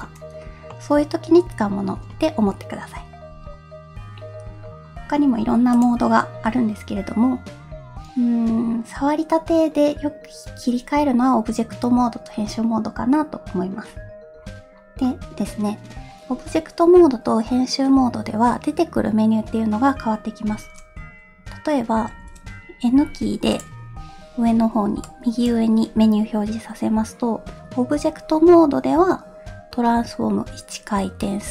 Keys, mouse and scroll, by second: 0.7 middle click, 1.4 Tab, 5.7-13.8 drag, 22.1 n, 23.5 click.